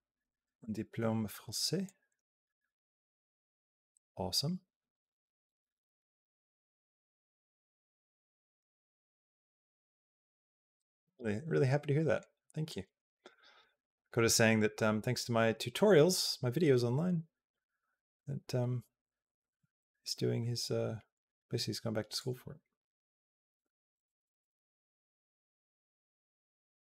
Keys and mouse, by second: 1.7-12.0 drag, 12.5 click, 22.0-27.0 drag.